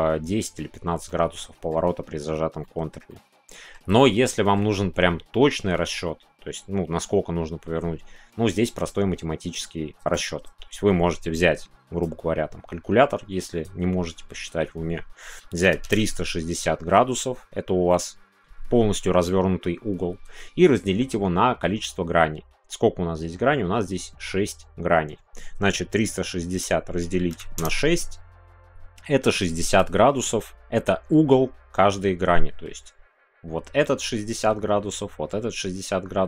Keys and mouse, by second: 1.0 middle click, 2.6 middle click, 3.1 shift+middle click, 3.9-12.3 middle drag.